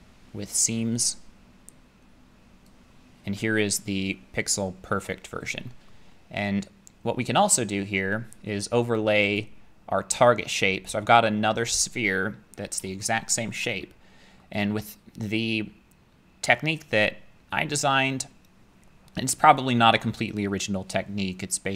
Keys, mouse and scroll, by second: 3.4 click, 5.9 middle click, 6.1 middle click, 6.2 middle click, 6.8 middle click, 9.4 click, 13.4 shift+middle click, 14.4 middle click.